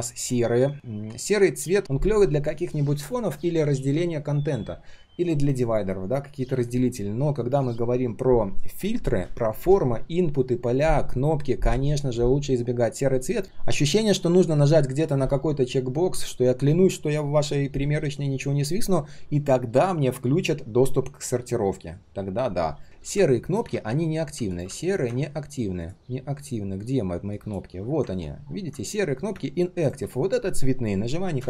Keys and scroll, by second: 23.7 ctrl+z.